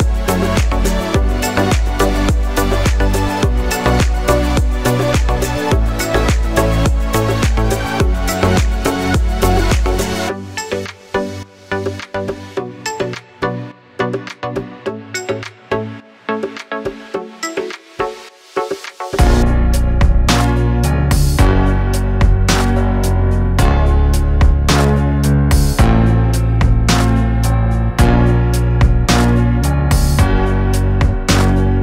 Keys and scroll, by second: 0.0 s, 4.5 e, 8.0 e, 8.8 s, 11.6 e, 12.4 s, 16.0 e, 17.0 s, 24.1 e, 25.9 s, 29.3 e.